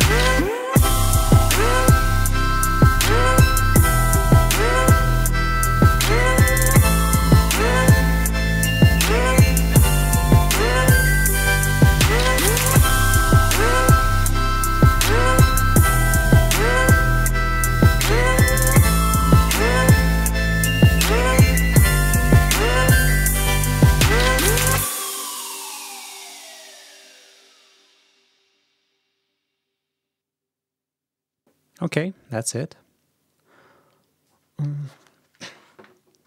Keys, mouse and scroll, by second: 4.1 ctrl+scroll up 2, 4.9 ctrl+scroll down 2, 6.4 ctrl+scroll down 2, 7.2 ctrl+scroll down 2.